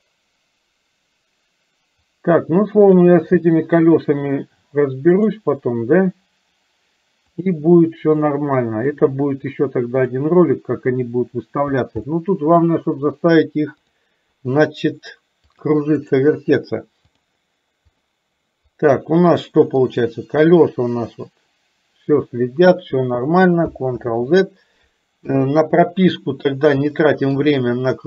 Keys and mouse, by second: 5.2 click, 7.5-8.5 drag, 8.9-10.2 drag, 12.1 middle click, 15.6 click, 17.4 click, 18.7 click, 20.0-23.1 drag, 24.1 ctrl+z, 25.2 KP_3, 27.0 shift+middle click.